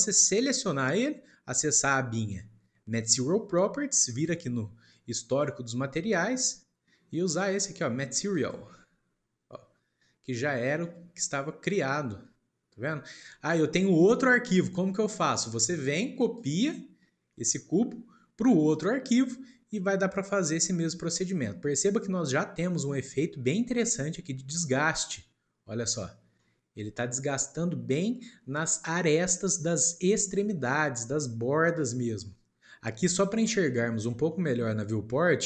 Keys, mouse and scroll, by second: 0.6 click, 3.0 click, 5.3-6.7 drag, 10.8-12.5 middle drag, 12.5 scroll up 1, 13.3 scroll down 2, 14.1-15.7 middle drag, 15.7 click, 16.3 click, 17.4-20.3 shift+middle drag, 20.7-21.8 shift+middle drag, 21.8 scroll up 1, 22.5-23.1 scroll up 2, 23.4-26.1 shift+middle drag, 26.5-29.5 middle drag, 31.7 scroll down 1, 31.9-32.8 middle drag, 34.3-35.4 shift+middle drag.